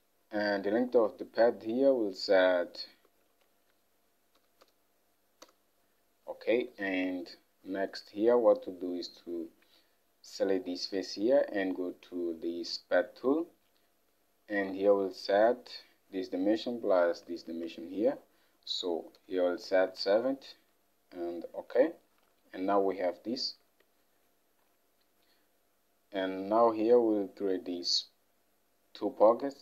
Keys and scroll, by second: 4.5 typing, 5.5 Return, 7.0 alt+Tab, 14.8 alt+Tab, 18.9-19.2 typing, 22.3 Home, 23.7 alt+Tab.